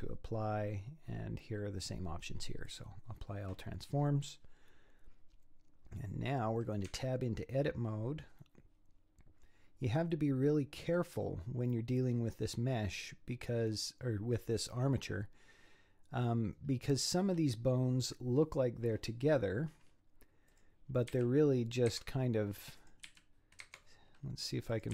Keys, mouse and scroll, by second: 3.8 scroll down 2, 5.4 scroll up 1, 6.9 Tab, 8.2-9.1 scroll up 6, 9.1-12.3 scroll down 2, 13.4-14.1 scroll down 2, 16.5-19.5 scroll up 6, 19.5 scroll up 6, 20.5 click, 21.1 g, 22.8 click, 23.1 g, 23.9-24.7 scroll down 5, 24.7 click.